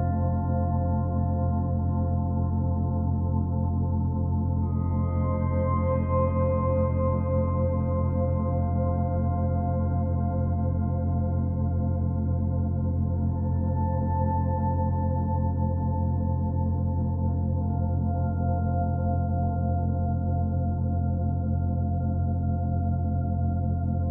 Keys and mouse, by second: 1.2 click, 2.0 alt+click, 4.0-6.1 typing, 7.4-8.4 drag, 8.6 click, 9.6 ctrl+alt+click, 10.9 ctrl+alt+click, 13.0 typing, 14.2-14.5 typing, 16.8-17.9 shift+drag, 17.9-18.8 typing, 21.7 click.